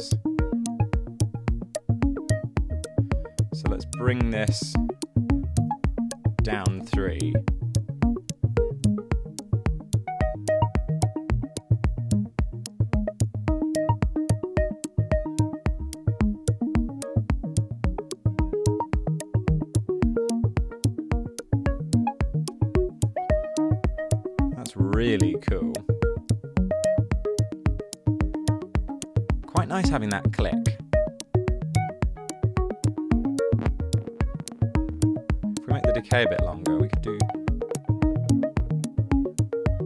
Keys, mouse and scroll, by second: 6.5-7.2 typing.